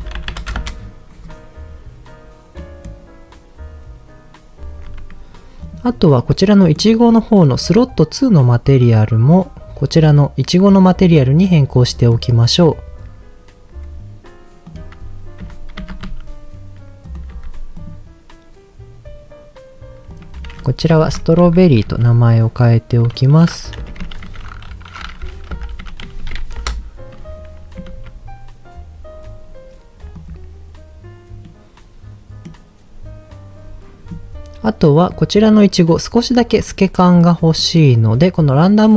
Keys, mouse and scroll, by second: 0.3 KP_0, 1.6-2.4 scroll up 1, 2.4 scroll up 1, 2.5-2.9 middle drag, 4.6 ctrl+shift+z, 5.6 click, 6.1 middle click, 7.6-9.3 drag, 9.3 click, 11.9 middle click, 14.6 click, 15.4 Tab, 15.8 a, 16.0 s, 17.1 click, 17.3 Tab, 17.7 click, 20.1-26.7 drag, 26.1 r, 27.9 ctrl+s, 29.5-30.2 scroll down 3, 30.1 click, 31.5-32.5 middle drag, 35.0 click, 36.6-37.1 scroll down 3, 36.9 middle click, 37.5 middle click, 38.0 scroll up 2, 38.5-38.9 drag.